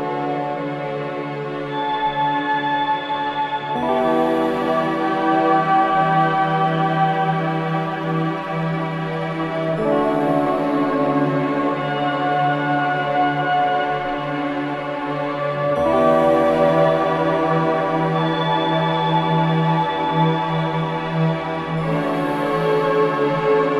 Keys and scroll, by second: 4.5 Escape, 7.0 4, 9.4 3.